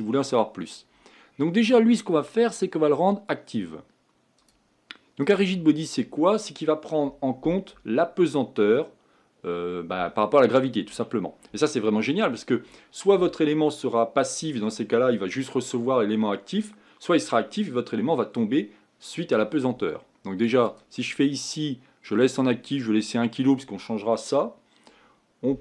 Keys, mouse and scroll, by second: 0.0-1.6 middle drag, 1.6-8.2 drag, 20.6-23.7 drag.